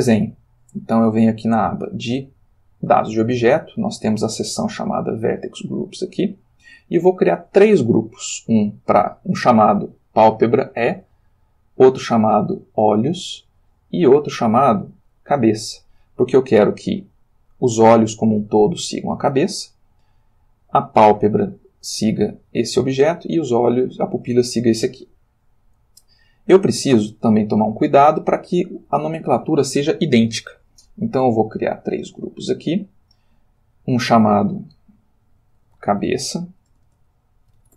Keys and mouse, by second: 1.4 click, 5.9 click, 6.4 middle click, 8.7 click, 11.8 click, 14.2 click, 22.3 click, 23.5-24.1 drag, 26.3 click, 31.6 click, 32.2 click, 32.8 click, 33.6 click, 35.6-37.7 typing.